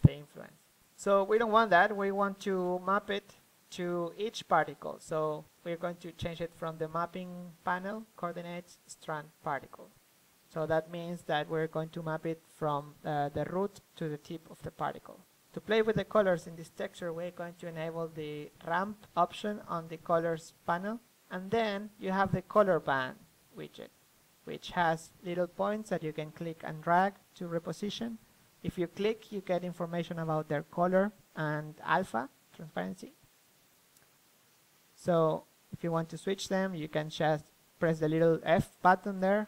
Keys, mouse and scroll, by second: 6.0-9.3 drag, 13.6-35.3 drag, 36.8-38.6 drag.